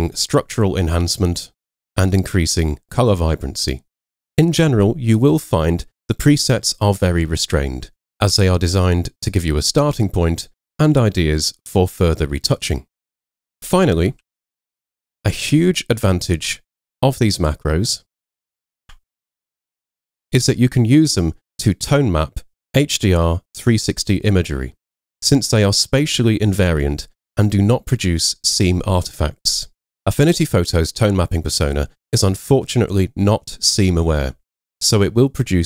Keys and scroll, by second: 14.3 super+w, 15.3 super+Tab, 16.3 super+Tab, 19.0 super+Tab.